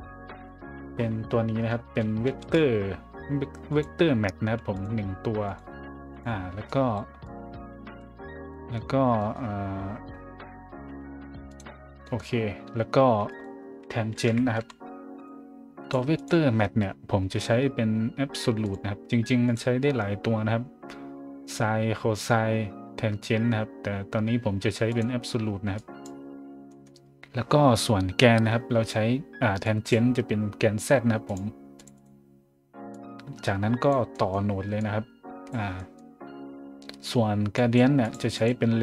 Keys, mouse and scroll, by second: 2.0-2.9 typing, 3.7 click, 4.7 click, 5.5 click, 6.1 click, 6.6 click, 7.2-8.0 drag, 8.5 middle click, 9.2 middle click, 9.7-11.1 scroll up 1, 11.5 click, 12.0 scroll up 1, 13.1-15.1 typing, 13.3 click, 15.1 click, 15.8 click, 16.1 click, 18.6 click, 19.4 click, 24.9 click, 25.7 click, 26.6 middle click, 27.2 scroll up 2, 29.6 click, 31.2 click, 31.7 click, 31.9 click, 32.9-33.9 drag, 34.1 middle click, 34.8-35.5 drag, 35.8 middle click, 37.5 click, 38.0 click, 38.4 click.